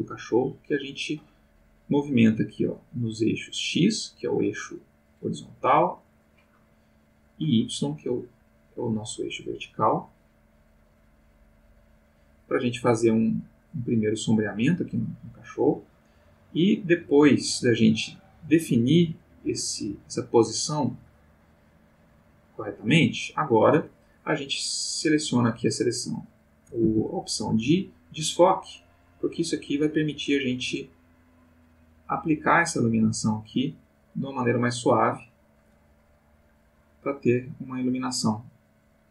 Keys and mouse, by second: 0.0-4.0 drag, 6.0-9.7 drag, 9.9-12.7 drag, 13.0-15.2 drag, 15.3-18.0 drag, 18.2-20.5 drag, 20.8-23.6 drag, 24.5 click, 26.0-27.2 drag, 26.8 Escape, 27.3-33.7 drag, 34.2 click, 35.0 click.